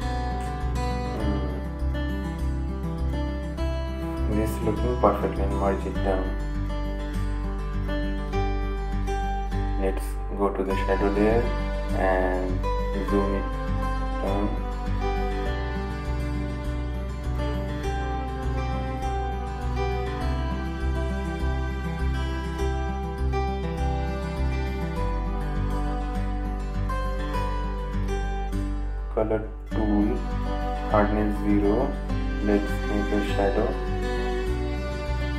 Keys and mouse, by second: 10.1 right click, 11.3 click, 14.8 click, 17.4-24.3 drag, 29.0 right click, 30.2 click, 33.6 right click, 34.3-35.3 drag.